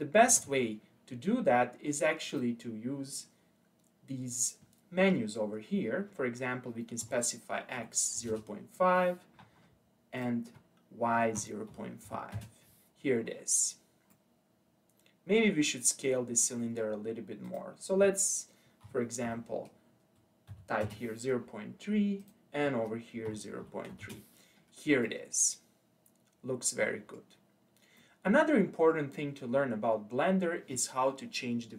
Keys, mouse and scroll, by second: 0.3 ctrl+z, 2.3-5.4 drag, 10.2-13.2 drag, 13.6-14.1 scroll up 2, 14.1-17.1 middle drag, 17.5-20.6 drag, 22.2-25.0 drag, 25.0-27.4 middle drag, 27.4-28.0 scroll down 1, 28.0-31.1 middle drag.